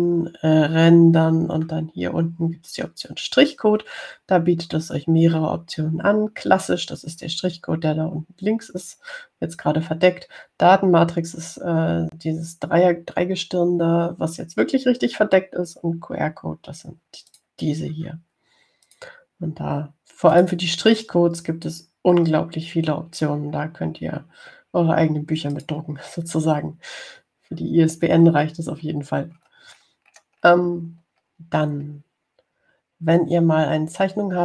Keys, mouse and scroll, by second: 0.0 click, 18.5 click, 20.1 click, 21.5 click, 26.7 click, 29.3 scroll down 1, 30.3-31.3 scroll down 2, 31.3 click, 32.2 click, 33.0 click.